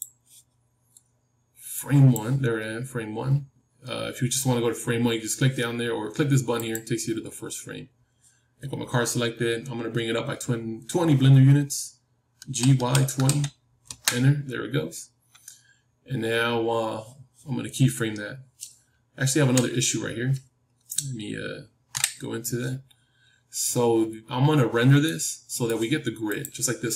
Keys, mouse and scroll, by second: 1.7-4.4 drag, 6.5-9.5 drag, 9.5-10.0 scroll down 1, 10.0 scroll down 1, 10.1-12.3 middle drag, 12.3 g, 19.3 KP_3, 21.8 KP_Decimal, 25.0-26.9 middle drag.